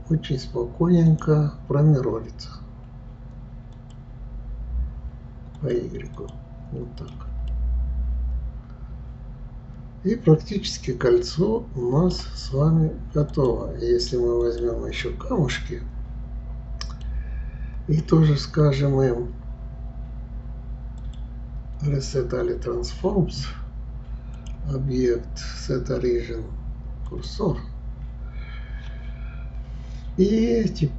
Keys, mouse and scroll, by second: 1.1-4.1 drag, 5.6 click, 6.2 click, 7.0 click, 7.5-10.5 middle drag, 13.3 click, 14.4 click, 15.6-18.6 middle drag, 21.0-21.8 drag, 24.4-27.5 drag.